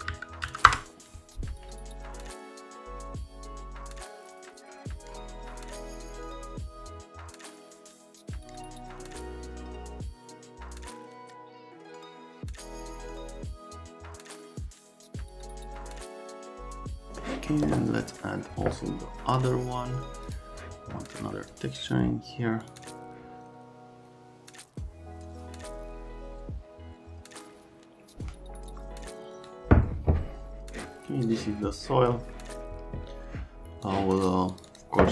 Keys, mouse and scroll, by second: 0.1 Down, 0.4 Down, 0.6 Return, 2.6 scroll up 1, 2.9 click, 3.0 click, 3.2 scroll up 1, 3.5 click, 4.9 click, 5.1 click, 5.4 click, 5.7 click, 6.0 click, 6.1 x, 6.4 click, 7.3 click, 7.9 click, 8.3 click, 8.9 click, 16.7 click, 16.9 click, 17.1 right click, 20.3 click, 22.6 click, 22.8 click, 31.2 click, 32.3 middle click, 33.8 click.